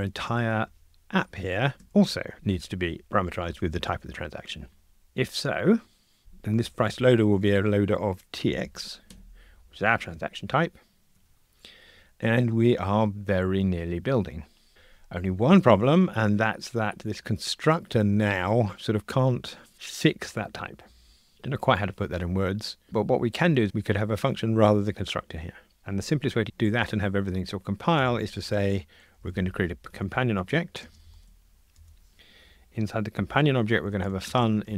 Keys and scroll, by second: 1.8 Escape, 9.1 Escape, 11.1 F2, 29.9 Return.